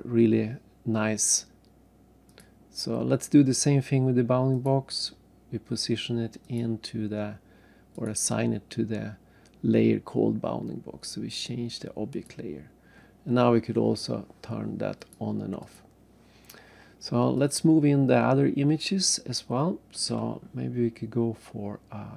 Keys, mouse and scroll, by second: 0.2-0.7 scroll down 3, 2.3 click, 3.4 scroll up 2, 4.5 click, 6.4 click, 8.0 right click, 12.1 click, 15.0 click, 15.6 click, 17.3 click, 18.2-18.7 scroll down 3, 18.7-19.5 scroll up 1, 19.5 scroll up 1.